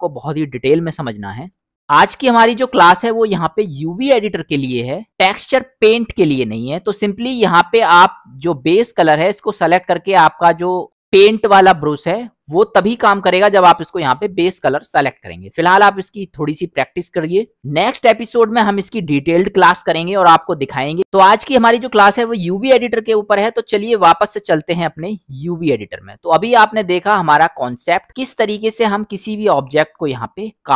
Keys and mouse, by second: 5.2 click, 6.6 middle click, 8.5-16.1 drag, 18.3-21.0 middle drag, 24.0 click, 26.3 middle click.